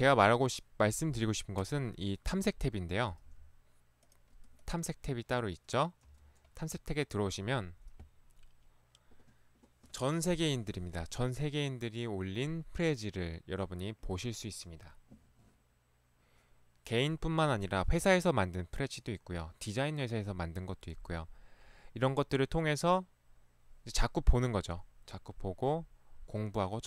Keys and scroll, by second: 3.3 ctrl+1, 6.1 ctrl+Escape, 6.2 ctrl+1.